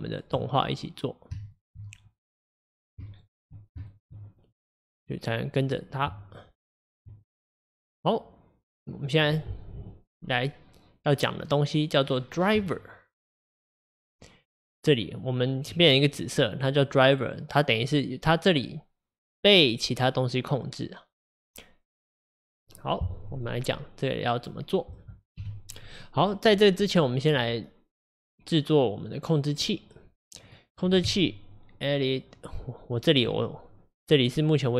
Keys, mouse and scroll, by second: 0.4 Tab, 2.5-4.6 middle drag, 4.6 click, 5.1 click, 7.1 Tab, 7.2 click, 13.6 click, 25.4 KP_1, 26.0 click, 33.3 Tab.